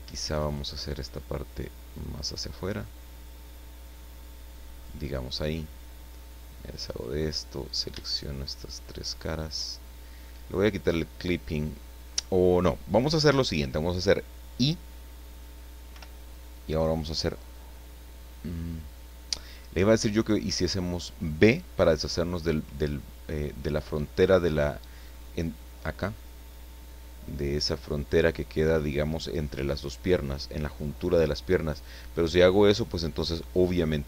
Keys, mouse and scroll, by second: 0.4 right click, 1.2-5.0 drag, 5.1 middle click, 6.7 click, 7.6 shift+right click, 8.1 shift+right click, 9.1 shift+right click, 15.9 i.